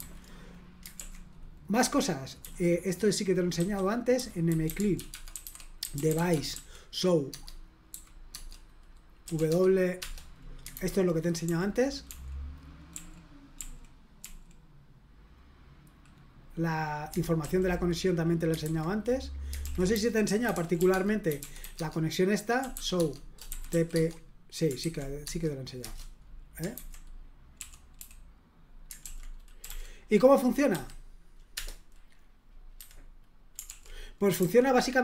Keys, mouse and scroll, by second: 0.9 super+l, 2.4 typing, 3.5-7.9 typing, 7.3 Tab, 8.3 Tab, 9.0-9.8 typing, 10.0 Return, 10.7 super+h, 11.2-14.2 typing, 17.4 super+l, 18.6 super+h, 19.6 super+l, 19.7-24.2 typing, 25.2 Tab, 25.8 Return, 26.7 super+h, 27.6-28.0 typing, 29.0 super+l, 29.6 l, 30.7 q, 31.5 Return, 32.7 q, 33.7 ctrl+l, 34.4 super+h.